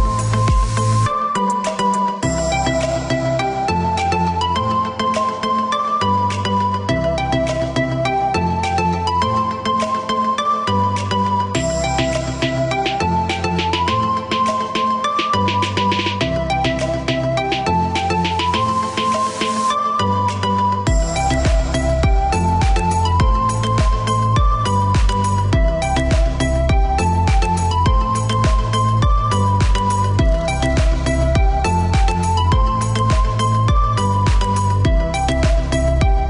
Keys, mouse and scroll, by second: 0.3 Escape, 2.1 click, 3.3 ctrl+click, 5.8 click, 6.5 space, 7.4 click, 8.1 click, 11.2 click, 13.8 click, 15.0 space, 16.7 click, 17.5 click, 17.8 scroll up 1, 18.4-19.6 scroll down 1, 19.6 click, 22.5 click, 23.8 click, 24.3 Escape, 25.3 click, 26.0 space, 26.7 click, 29.6 middle click, 30.8 click, 33.5 click, 35.2 click, 35.8 middle click.